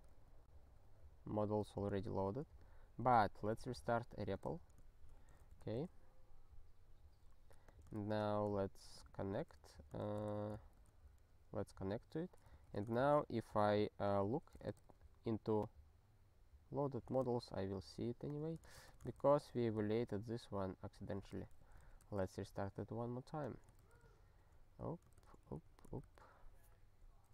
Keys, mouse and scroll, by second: 1.5 ctrl+g, 2.2 ctrl+s, 3.8 super+o, 4.4 super+r, 5.6 s, 6.6 super+r, 7.6 click, 8.1 ctrl+u, 9.1 ctrl+s, 10.0 Return, 10.8 ctrl+s, 12.5 alt+x, 13.8 Return, 17.2 ctrl+g, 18.3 click, 18.5 ctrl+space, 18.6 ctrl+a, 18.8 alt+;, 19.2 ctrl+s, 21.3 super+r, 22.0 s, 23.0 super+r, 23.4 click, 23.5 click, 23.9 ctrl+u, 24.3 ctrl+s, 25.1 Return, 26.0 ctrl+s.